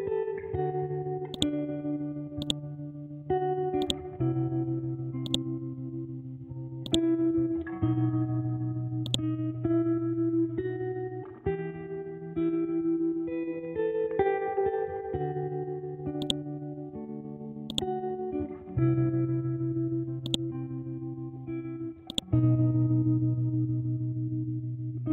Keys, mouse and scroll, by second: 1.3-5.3 drag, 5.6-6.1 scroll down 1, 6.1 scroll up 1, 6.8 click, 7.4 Left, 8.4 Down, 8.8 Left, 9.0 click, 9.3 scroll down 1, 15.4-16.2 scroll down 1, 16.2 click, 18.8 scroll up 1, 20.2 click, 21.0 scroll down 1, 21.4 scroll up 1, 22.1 click, 23.3 Down.